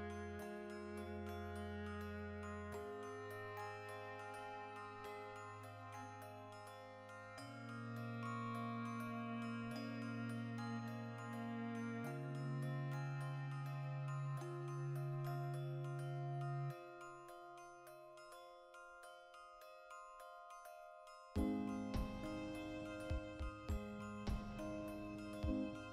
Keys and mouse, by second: 1.4-2.4 drag, 2.4-4.3 ctrl+shift+middle drag, 4.3 click, 4.8-6.5 ctrl+middle drag, 6.5 click, 7.0 middle click, 7.4-9.7 drag, 12.6 Return, 12.6-14.0 drag, 14.0 shift+middle click, 14.6-22.0 drag, 17.6 Tab, 18.4 a, 18.9 r, 20.7 Return, 22.0-25.8 middle drag, 24.3 Tab, 24.6 z, 25.8-25.9 drag.